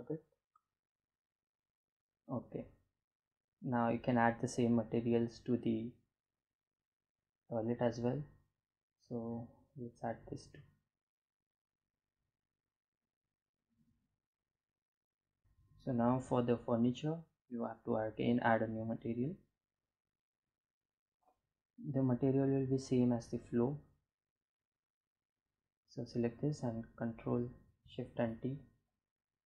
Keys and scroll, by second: 18.7 g, 26.4 ctrl+shift+t.